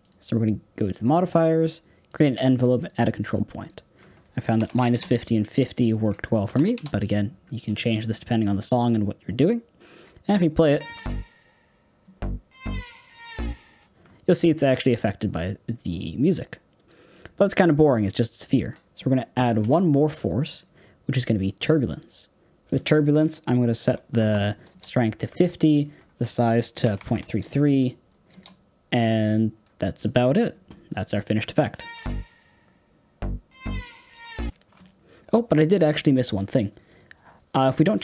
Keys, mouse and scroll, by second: 2.1-10.2 drag, 10.2 middle click, 10.7 space, 12.0 middle click, 12.5-13.8 scroll down 3, 13.8 space, 16.3 click, 18.5 click, 18.9-21.3 middle drag, 21.3 shift+a, 24.6-28.2 drag, 28.2 KP_3, 30.4-31.7 middle drag, 31.7 space, 34.4 space, 35.9-38.0 drag.